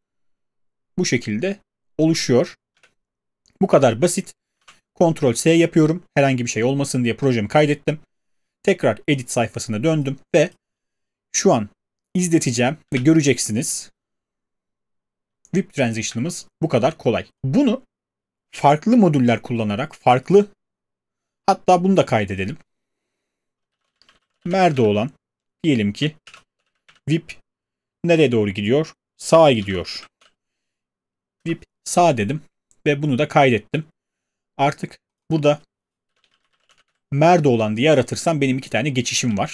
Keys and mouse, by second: 2.7 space, 4.6 ctrl+s, 12.8 space, 16.1 space, 23.4-25.1 typing, 26.2-31.8 typing, 35.8-37.7 typing.